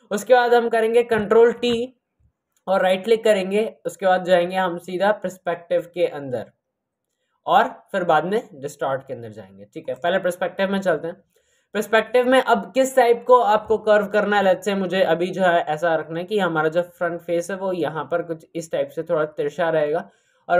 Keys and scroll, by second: 1.4 ctrl+t.